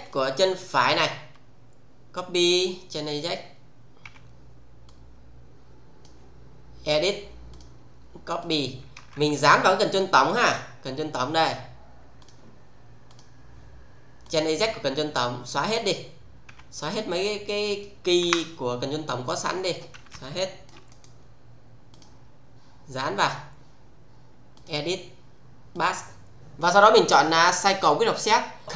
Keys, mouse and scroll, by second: 0.0 click, 0.9 f, 3.2 click, 4.0 f, 4.9-6.1 click, 7.0 click, 8.9 space, 10.4 click, 12.1 click, 14.2 click, 15.9-16.4 scroll down 1, 16.4 f, 16.9-17.8 click, 18.1 Delete, 20.1-20.8 shift+middle click, 20.8 right click, 21.9 click, 23.0-23.5 click, 24.5 click, 25.7 click.